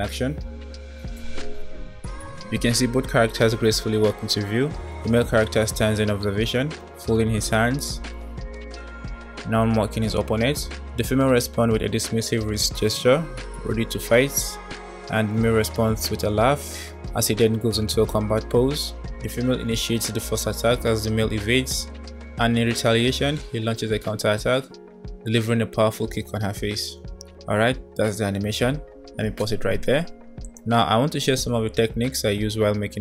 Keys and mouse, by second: 1.0 space, 29.6 space, 30.5 click.